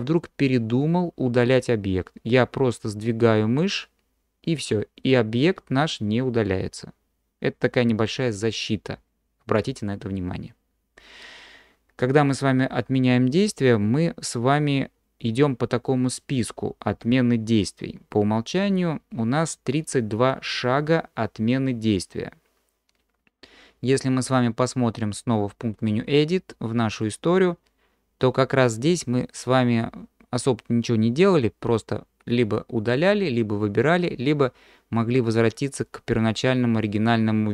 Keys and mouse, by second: 25.9-37.3 drag.